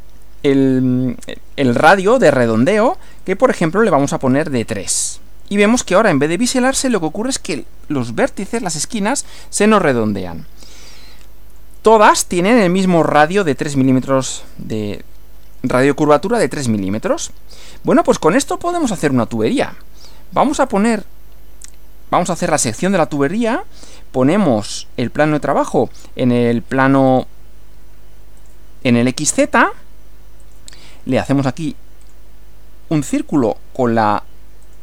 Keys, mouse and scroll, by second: 3.1 click, 4.9 3, 5.9 click, 11.0-11.8 middle drag, 13.8-15.2 middle drag, 16.3-17.4 shift+middle drag, 17.5 shift+scroll up 2, 20.7 click, 25.6 click, 27.1 click, 28.4 click, 30.4 click, 32.0 click, 34.6 click.